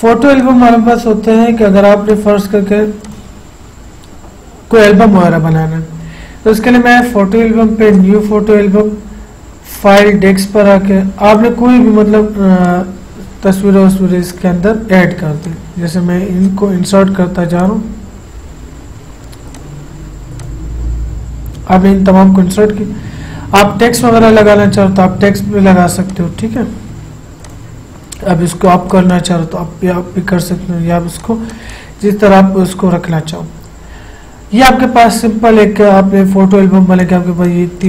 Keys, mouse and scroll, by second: 7.1 click, 19.0 scroll down 1, 19.7 click, 24.5-27.6 drag, 31.3 click, 37.1 click.